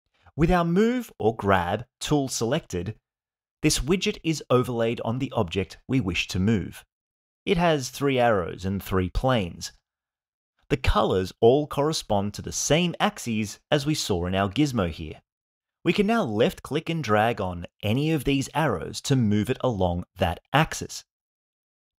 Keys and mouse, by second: 16.4 click, 16.7-18.0 drag, 18.4-19.4 drag, 19.8-20.8 drag.